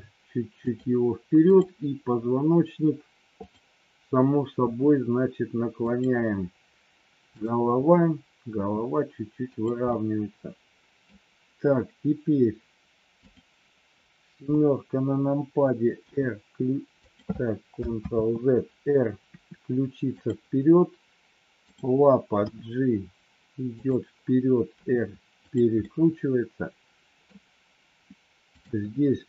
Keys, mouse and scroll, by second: 1.5 click, 8.5 r, 9.9-11.0 middle drag, 13.1 click, 14.3 KP_7, 15.9 g, 17.9 ctrl+z, 19.3 r, 21.6 click, 22.4 g, 24.8 r, 25.8-27.3 middle drag, 28.4 click.